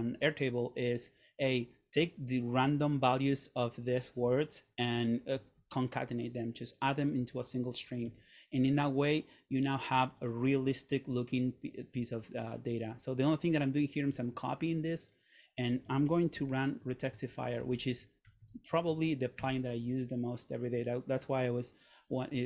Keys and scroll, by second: 8.2 Escape, 14.2 super+c, 16.5 super+/, 16.9 r, 17.8 super+/, 18.1-19.5 typing, 19.5 Return.